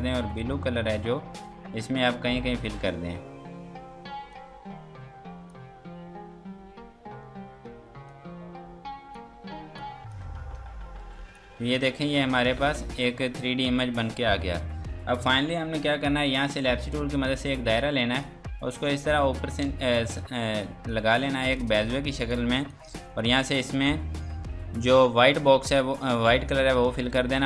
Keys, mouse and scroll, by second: 8.1 click, 10.4 space, 10.7 scroll down 1, 11.0 Escape, 11.3 click, 12.6 F2, 16.8 click, 17.2-18.2 scroll down 1, 18.2 click, 19.7 ctrl+space, 20.3 F2, 20.6 click, 21.3 F2, 21.6 click, 25.7 click.